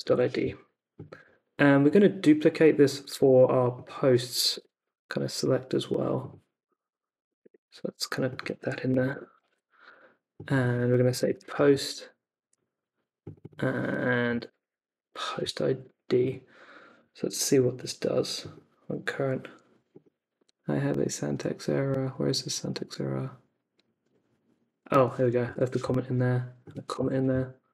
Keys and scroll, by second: 0.0-0.5 typing, 3.1 super+c, 4.3 BackSpace, 4.5 Return, 7.2 BackSpace, 7.4 Return, 9.1 Return, 9.4 super+v, 10.8-12.0 typing, 14.0-15.8 typing, 25.4 BackSpace, 26.9 BackSpace.